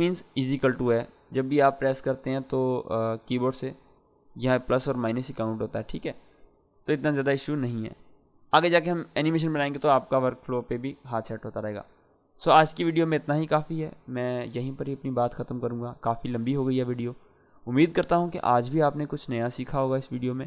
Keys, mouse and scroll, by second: 4.7 =, 6.9-7.5 drag.